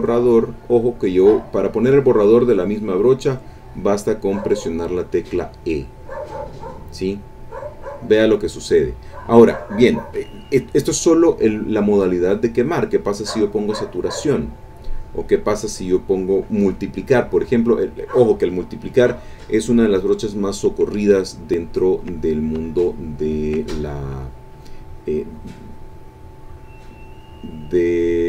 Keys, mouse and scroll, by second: 0.4 click, 1.0-7.0 drag, 12.0 click, 13.5 click, 15.3 click, 17.6 click, 21.9 ctrl+click, 22.7-23.7 shift+drag, 24.0-28.2 shift+drag.